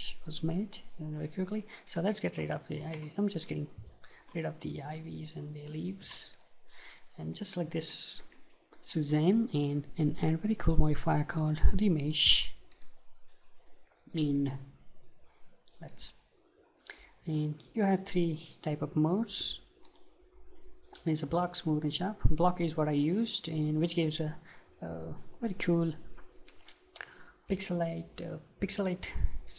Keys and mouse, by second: 1.9-4.3 drag, 3.0 Delete, 5.7-9.9 drag, 6.1 Delete, 8.5-9.9 middle drag, 11.4-13.3 drag, 16.1 ctrl+z, 19.9-22.8 drag, 27.5-29.3 middle drag.